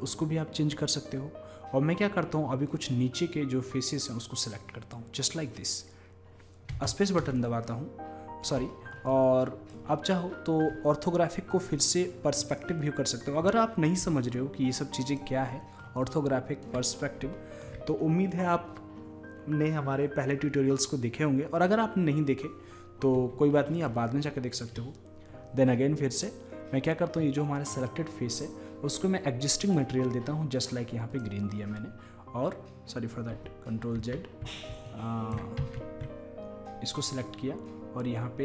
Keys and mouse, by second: 2.7-4.4 drag, 6.8 space, 7.2 space, 9.1 click, 9.3 click, 10.4 middle click, 10.6 middle click, 10.8 middle click, 11.1-11.5 middle drag, 12.5 click, 13.0 middle click, 13.1 click, 13.3 middle click, 14.2 click, 14.3-17.9 middle drag, 24.0-25.6 middle drag, 25.6 click, 29.6-31.5 drag, 34.0 ctrl+z, 34.9-36.7 drag, 35.6 ctrl+z.